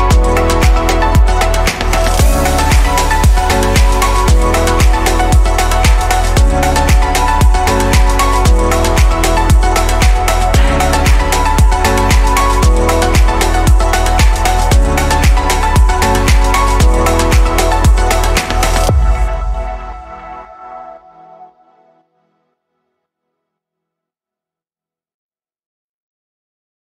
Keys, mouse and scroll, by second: 1.1 click, 4.0 click, 4.4-5.1 scroll down 2, 5.1-7.7 middle drag, 7.7-8.6 scroll up 1, 8.6 click, 11.5 click, 12.4 click, 13.2 Delete, 13.9-14.9 scroll down 2, 14.9-15.8 middle drag, 15.8-16.3 scroll up 3, 16.4 click, 18.2 click, 18.7-20.2 scroll up 2, 20.2 click, 24.9-26.8 drag.